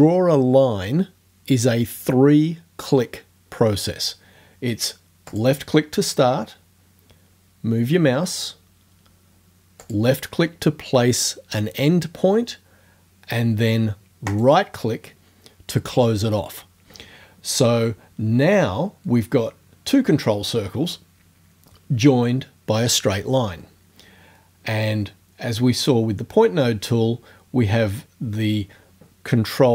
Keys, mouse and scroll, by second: 5.3 click, 9.8 click, 14.3 right click.